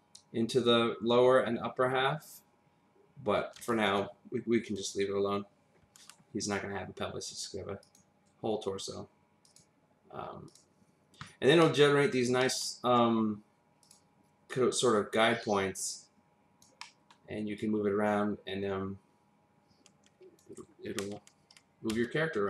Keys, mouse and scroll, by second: 4.7 click, 7.8 click, 9.4 click, 10.5 click, 11.3 scroll down 1, 11.6 middle click, 12.1-12.4 scroll up 1, 12.4 middle click, 13.8 click, 14.5 click, 16.8 middle click, 17.6 click, 21.9 w.